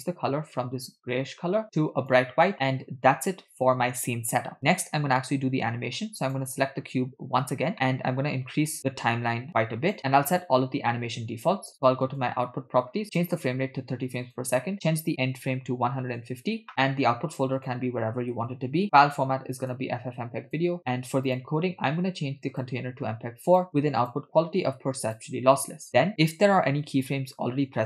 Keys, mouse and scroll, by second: 6.3 drag, 7.7 middle click, 8.8-10.0 drag, 12.1 click, 13.1-14.6 drag, 14.7-16.3 drag, 17.5 scroll down 3, 17.6-18.8 drag, 18.5 /, 19.7-20.7 drag, 20.8-21.3 scroll down 2, 21.3 click, 21.5-22.5 scroll down 1, 22.5 scroll down 1, 22.6-23.7 drag, 24.0-25.4 drag, 26.5 middle click.